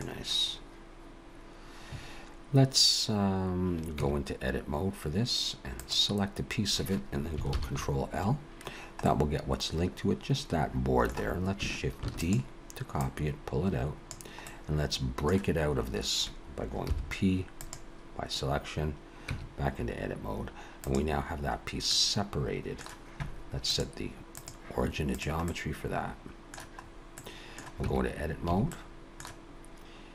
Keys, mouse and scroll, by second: 4.0 Tab, 5.8 click, 7.5 ctrl+l, 8.7 scroll down 1, 9.0 middle click, 12.0 shift+d, 13.0 click, 14.3 middle click, 16.9 p, 19.3 Tab, 20.7 click, 21.8 middle click, 23.7 click, 25.5 middle click, 26.8-27.2 scroll up 1, 27.2 middle click, 27.8 Tab, 28.5 a, 28.7 middle click.